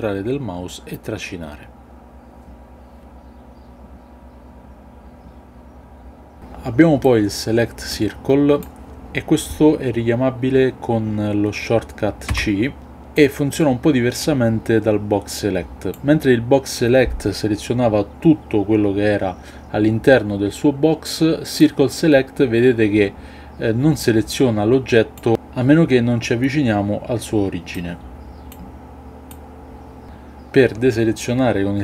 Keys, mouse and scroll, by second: 2.0 b, 7.9 click, 12.2 c, 29.2-30.0 drag.